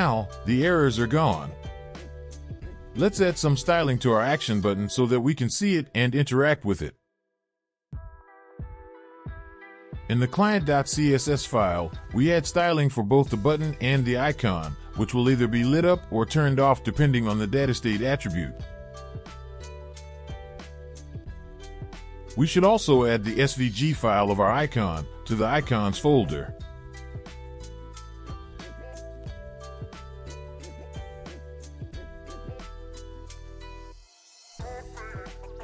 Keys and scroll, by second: 9.2 ctrl+p, 11.0-12.4 typing, 13.0 Down, 13.8 Return, 16.0 Return, 16.6 ctrl+v.